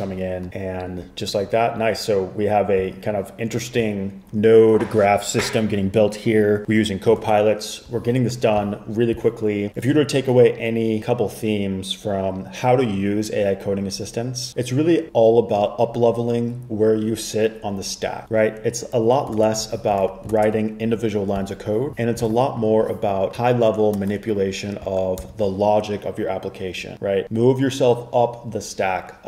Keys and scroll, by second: 7.3 super+Tab, 19.5 super+Tab, 20.1 super+Tab, 20.4 super+Tab, 20.6 super+Tab, 22.4 super+Tab, 25.3 super+k.